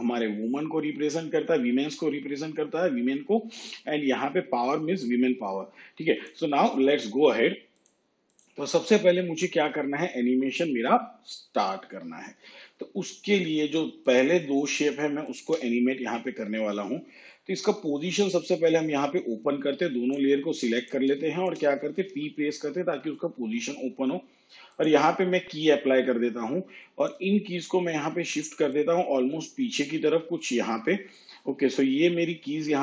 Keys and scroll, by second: 22.1 p.